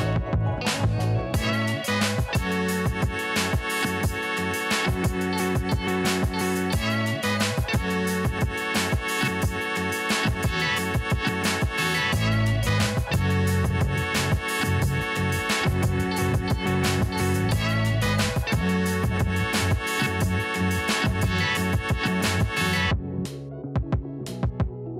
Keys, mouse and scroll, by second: 0.3 alt+scroll down 1, 1.6-1.9 alt+scroll up 1, 2.9 click, 4.4-4.8 alt+scroll up 1, 4.9 shift+click, 5.5 alt+scroll down 1, 6.8 alt+scroll up 1, 6.8 scroll down 1, 7.4-7.7 alt+scroll up 1, 8.2 ctrl+t, 9.0-10.7 alt+shift+drag, 13.3-14.0 alt+scroll down 3, 14.0 ctrl+s, 15.8-16.5 scroll up 1, 16.5-19.9 drag, 19.9-22.8 drag, 23.0-23.4 alt+scroll down 1, 23.7-24.3 alt+scroll up 1.